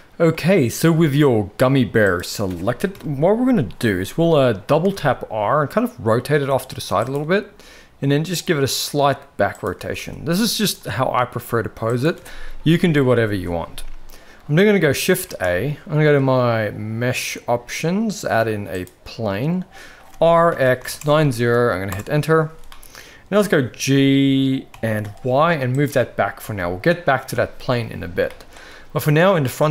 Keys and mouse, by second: 2.9 KP_1, 4.8 r, 7.6 r, 9.8 r, 11.3 r, 15.3 shift+a, 20.1 r, 22.7-23.4 middle drag, 24.7 g, 26.4 KP_1, 28.3 shift+middle drag.